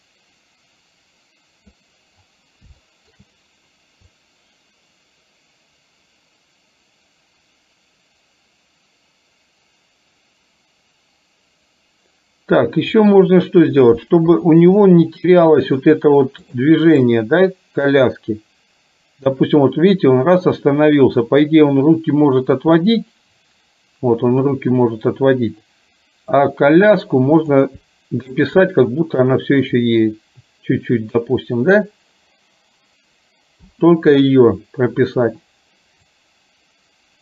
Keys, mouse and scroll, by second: 2.9 shift+middle click, 4.2-13.2 drag, 14.5 KP_3, 16.6 click, 17.2-26.5 drag, 27.4 click, 29.9-31.4 drag, 36.2-37.2 drag.